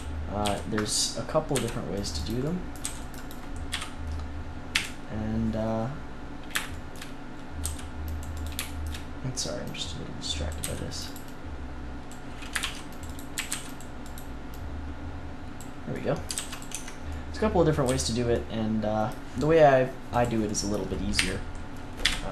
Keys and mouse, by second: 0.0-0.4 typing, 1.5 c, 2.8 c, 3.6 KP_3, 4.7 KP_1, 7.6 c, 8.4-10.4 middle drag, 10.4 click, 10.6 c, 12.5 ctrl+r, 13.1-16.7 drag, 13.3 a, 13.4 c, 16.3 ctrl+s, 16.7 Tab, 17.8 z, 20.1-22.0 drag, 21.1 KP_1, 22.0 KP_3.